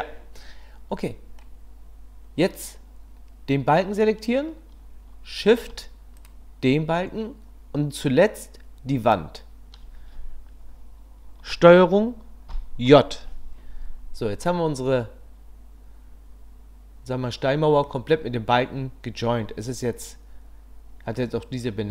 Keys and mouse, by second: 1.1 click, 6.2 shift+click, 12.5 ctrl+j, 14.4-17.9 drag.